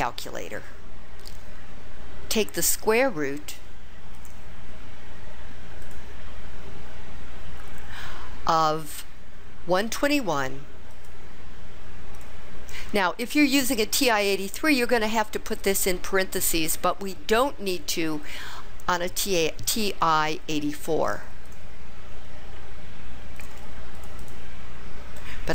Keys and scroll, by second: 10.4 1, 11.0 2, 12.2 1, 21.6 ÷, 23.5 1, 24.1 4, 24.3 4.